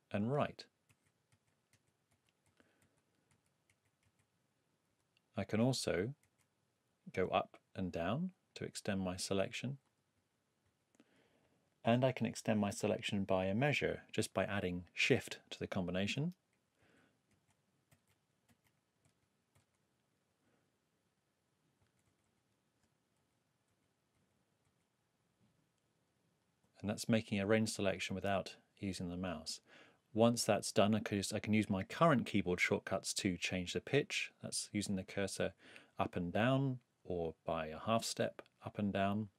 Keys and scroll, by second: 0.4 alt+Left, 0.9 alt+Right, 2.1 alt+Left, 3.7 alt+Right, 4.9 alt+Left, 6.2 alt+Right, 7.3 alt+Down, 8.5 alt+Up, 10.1 alt+Down, 16.8 alt+shift+Right, 19.0 alt+shift+Down, 21.8 alt+shift+Down, 23.7 alt+Down, 33.9 Up, 34.7 Down, 35.4 Up, 35.9 Down, 38.0 shift+Up, 39.0 shift+Down.